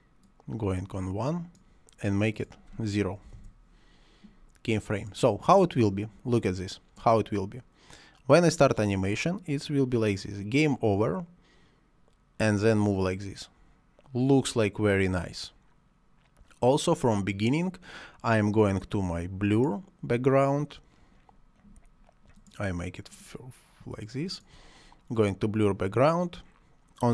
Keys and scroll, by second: 3.2 0, 3.3 Return.